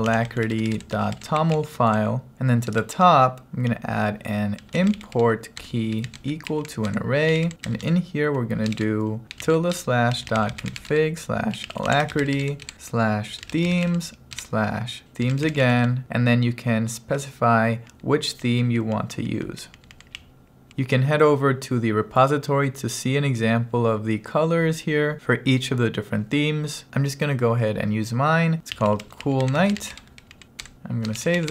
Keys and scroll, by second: 0.0-2.8 typing, 4.4-16.4 typing, 7.0 Return, 17.9 Down, 18.6 Down, 19.1 Down, 19.7 Down, 20.2 Up, 28.5-30.2 typing, 30.4 Down, 30.7 Return, 31.4 w.